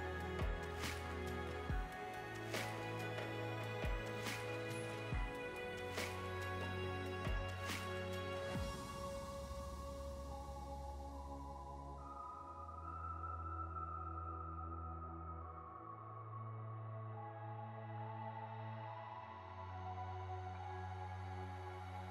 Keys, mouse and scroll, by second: 4.4 space, 5.0 click, 5.9 middle click, 6.4 scroll up 6, 6.9 click, 8.9 click, 9.6 click, 10.7 click, 10.9-12.2 scroll down 15, 13.1 click, 13.2-13.5 scroll down 3, 13.6 click, 14.7 space, 15.6 click, 20.5 space, 21.0 click.